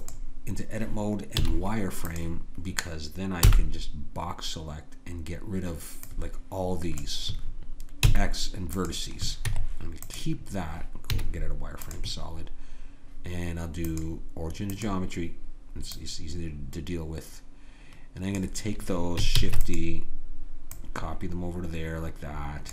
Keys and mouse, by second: 1.4 z, 3.5 b, 8.0 x, 9.5 Tab, 11.1 z, 13.9 click, 19.4 shift+d.